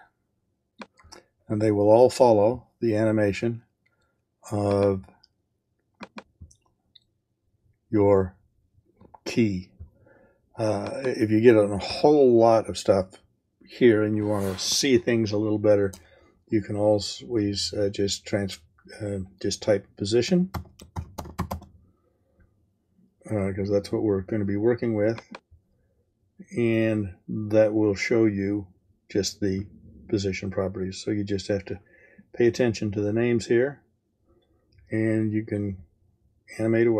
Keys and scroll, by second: 20.0-22.0 typing.